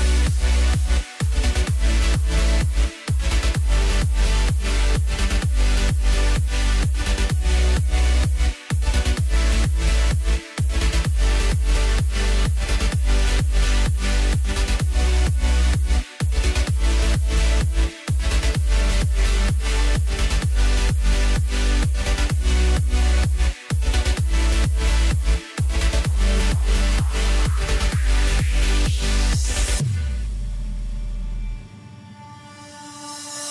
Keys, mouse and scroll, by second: 0.3 s, 2.1-3.0 scroll up 2, 3.0-3.4 scroll down 1, 3.4-5.1 middle drag, 5.1 KP_1, 5.8-6.3 ctrl+KP_6, 7.1-8.2 scroll up 3, 8.2 Tab, 10.2 middle click, 11.1 click, 12.0 KP_1, 13.1 s, 15.0 g, 17.4-17.9 scroll up 1, 17.9-18.2 scroll down 1, 18.2-19.2 middle drag, 19.2 click, 20.4-22.2 middle drag, 22.2 KP_1, 23.5 e, 24.3 s, 26.5 e, 28.9-29.3 scroll up 1, 29.3-29.7 scroll down 2, 29.7-31.1 middle drag, 31.1-31.7 scroll up 1, 31.7-33.5 middle drag.